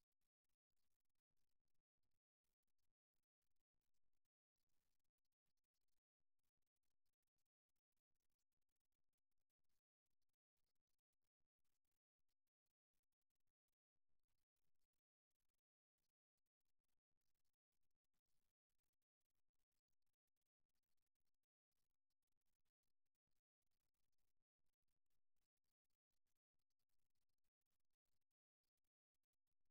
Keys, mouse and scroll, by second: 1.3 KP_3, 2.7 g, 4.7-6.5 middle drag, 7.9-9.5 middle drag, 10.1 middle click, 11.3-13.3 right drag, 13.9 middle click, 16.2-18.6 right drag, 18.6 f, 19.3 middle click, 21.3 middle click, 22.6-24.1 right drag, 25.1 f, 26.1 middle click, 28.3-29.7 middle drag.